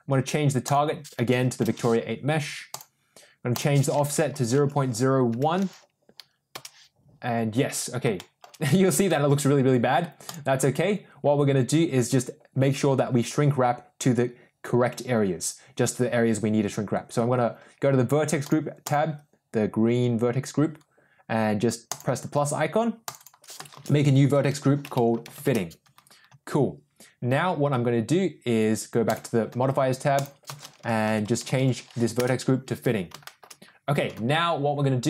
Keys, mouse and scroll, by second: 0.6-2.9 drag, 3.4-7.0 drag, 8.1-8.4 shift+middle drag, 8.6 middle click, 10.1 click, 21.8 click, 23.0 click, 23.1-25.8 drag, 28.9 click, 30.0-32.7 drag, 31.1 t, 33.1 middle drag.